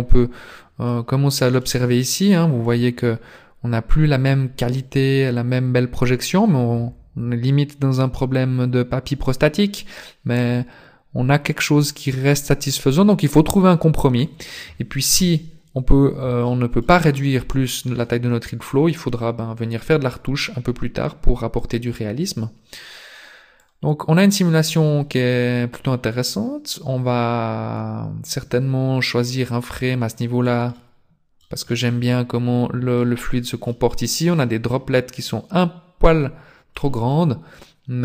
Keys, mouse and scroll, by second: 0.9 middle click, 2.0 middle click, 4.7 click, 15.1 KP_0, 16.4 shift+middle click, 23.5 click, 30.7 middle click, 31.7 middle click, 33.7 middle click, 34.7 middle click, 37.1 middle click.